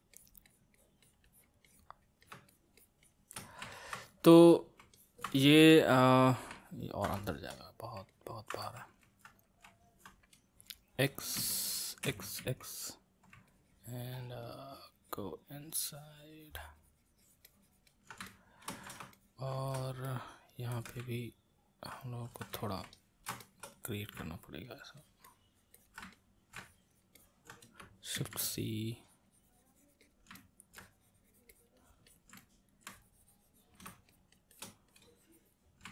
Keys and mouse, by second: 3.7-11.1 ctrl+middle drag, 11.4 c, 12.4 x, 13.5-18.3 ctrl+drag, 18.3-21.2 middle drag, 21.2-22.9 ctrl+drag, 22.9-24.3 ctrl+middle drag, 24.3-26.1 ctrl+drag, 26.1 middle click, 26.6-28.1 ctrl+drag, 28.1 shift+c, 28.5-30.3 drag, 30.3 middle click, 30.8-32.4 drag, 32.4 middle click, 32.9-35.9 drag.